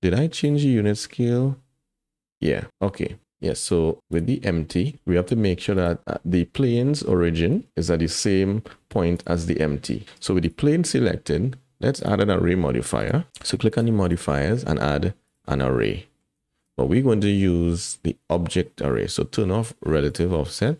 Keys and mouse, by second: 0.3 click, 4.1 click, 4.7 click, 7.7 g, 9.5 g, 10.0 shift+click, 10.4 click, 13.0 click, 14.0-15.3 drag, 15.8-16.2 middle drag, 16.5 shift+middle click, 16.8 middle click, 20.1 click.